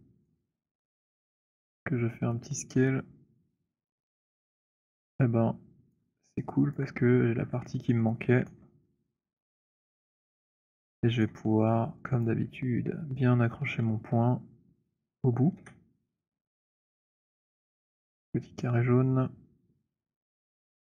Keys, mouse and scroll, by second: 0.4 alt+click, 1.2 r, 3.6 click, 6.0 click, 6.8 alt+click, 8.1 alt+middle click, 8.8 alt+right click, 9.4 alt+middle click, 9.9 alt+right click, 11.1 right click, 12.4 click, 15.6 w, 18.0 middle click, 19.7-20.9 typing.